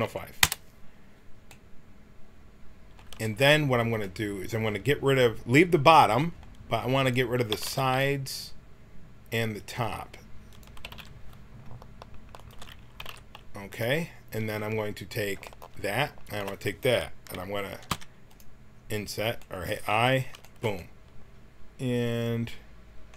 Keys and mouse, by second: 7.0-8.2 drag, 7.5 x, 10.5-14.2 drag, 10.8 x, 13.0 x, 15.4-18.3 drag, 17.9 i, 19.4 middle click.